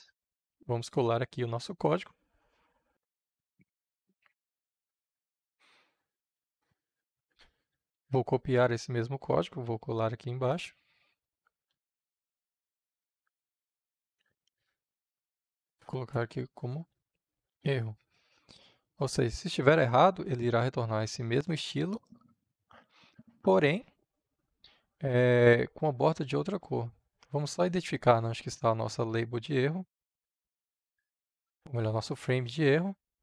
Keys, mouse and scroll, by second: 0.6 ctrl+v, 6.1-9.1 drag, 9.7 ctrl+c, 10.2 click, 11.1 Return, 12.4 Tab, 13.1 ctrl+v, 15.1-16.6 drag, 16.6-18.0 typing, 24.3-27.6 drag, 31.1-33.2 drag.